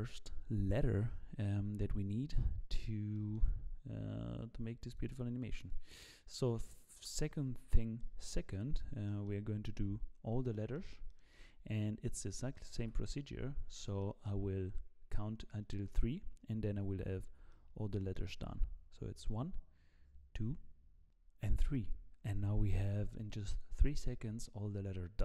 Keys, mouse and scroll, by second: 3.2 middle click, 8.0 middle click, 8.6-9.0 scroll down 2, 9.0 shift+middle click, 10.1-10.5 scroll up 1, 10.5 middle click, 11.3 shift+middle click, 12.8 KP_1, 13.6-14.0 scroll down 2, 14.0 shift+middle click, 14.4 scroll up 2, 15.8-16.7 scroll up 1, 17.5 shift+middle click, 21.0 click.